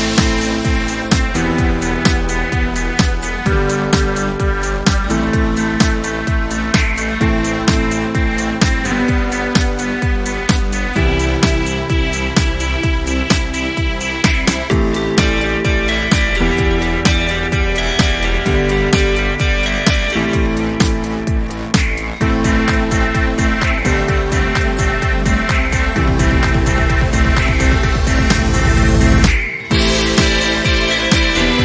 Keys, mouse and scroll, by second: 0.7-1.9 drag, 4.5-4.9 ctrl+scroll down 1, 6.1 ctrl+scroll up 1, 6.6-8.9 drag, 13.6-14.4 ctrl+scroll down 1, 15.0 space, 15.2 click, 15.5 space, 16.3 ctrl+scroll up 1, 17.7 p, 18.7 click, 28.0 v, 28.7 ctrl+shift+v, 30.1 click, 30.7 ctrl+scroll up 1, 31.2-31.6 drag.